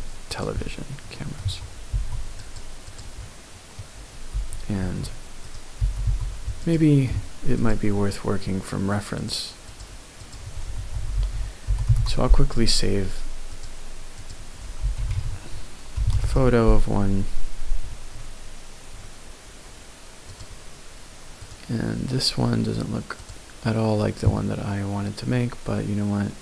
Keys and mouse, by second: 0.3 click, 0.5 middle click, 1.2 middle click, 1.4 Tab, 1.9 ctrl+r, 2.9 click, 3.2 middle click, 3.4 click, 4.1 g, 4.8 x, 5.4 right click, 5.8 g, 6.0 y, 6.6 click.